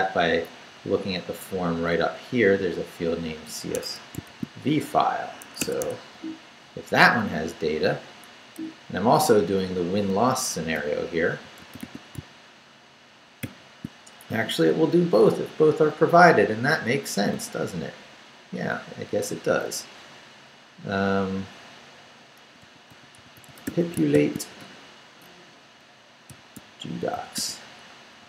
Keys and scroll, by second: 1.9 Up, 3.8 Escape, 4.3 shift+v, 5.6 Escape, 6.1 Down, 7.3 Down, 8.5 Right, 9.5 a, 11.2-12.1 typing, 13.4 shift+;, 16.7 Return, 17.3 Tab, 22.1-28.2 typing.